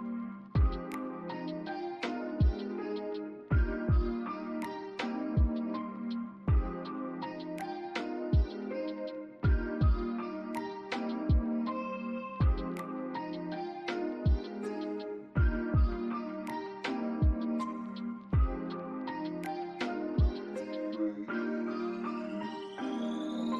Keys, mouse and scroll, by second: 0.3 alt+click, 0.3 alt+scroll down 1, 0.8 alt+click, 1.5 scroll down 1, 2.3 alt+middle click, 2.7 alt+click, 4.4 scroll up 1, 5.0 alt+click, 5.5 alt+middle click, 5.9 alt+click, 8.5-9.4 typing, 9.2 scroll up 1, 10.0 alt+middle click, 10.5 alt+click, 13.2 double click, 14.1 alt+click, 15.7 double click, 16.5 BackSpace, 17.4 scroll down 1, 17.7 alt+click, 19.4 double click, 20.5 alt+middle click, 22.4 alt+click, 23.0 alt+middle click, 23.3 alt+click.